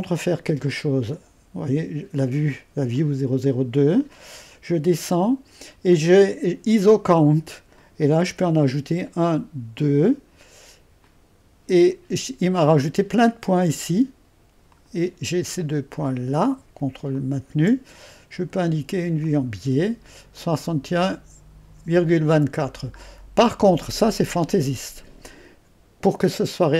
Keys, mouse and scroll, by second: 0.0-8.9 drag, 8.9-10.3 scroll up 2, 10.3-11.0 scroll up 1, 11.0-14.2 drag, 14.7-15.9 drag, 16.6 ⌨, 17.2-18.2 drag, 19.2-23.0 drag, 23.0-24.4 scroll down 1.